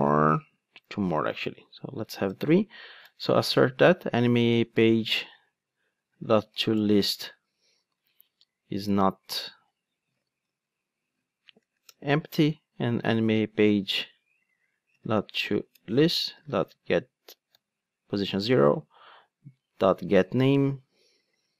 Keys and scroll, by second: 7.1 Return, 8.0 alt+shift+Right, 11.8 Return.